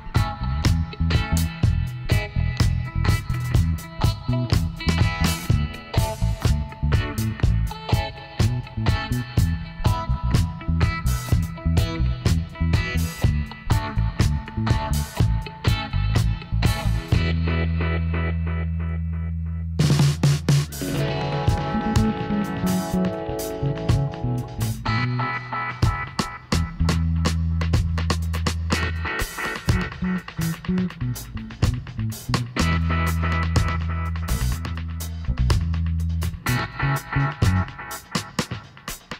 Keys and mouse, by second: 1.9 KP_7, 2.7-4.5 drag, 4.6 click, 5.2-9.5 middle drag, 10.6 z, 10.8-12.8 middle drag, 12.1 ctrl+r, 13.6 g, 15.5 s, 19.5 ctrl+r, 20.8 r, 23.0 s, 24.8 click, 25.4 g, 27.5 ctrl+r, 29.9-31.6 drag, 30.4-32.1 right drag, 31.2 g, 32.3-34.3 middle drag, 34.3 ctrl+r, 35.0-36.8 right drag, 35.8 ctrl+r, 36.8 middle click, 36.9-38.6 right drag, 37.9 g.